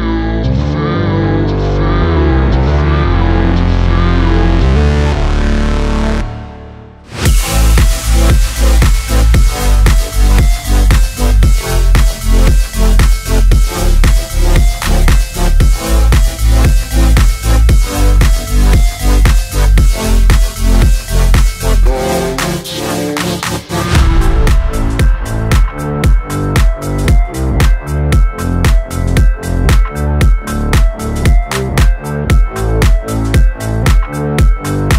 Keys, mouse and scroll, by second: 1.1 ctrl+z, 1.4 ctrl+d, 2.5 ctrl+d, 4.0 ctrl+d, 12.5 click, 17.4-18.1 scroll up 1, 18.1 space, 18.3 click, 18.4 space, 21.7-33.1 drag, 33.1 v, 33.4 click.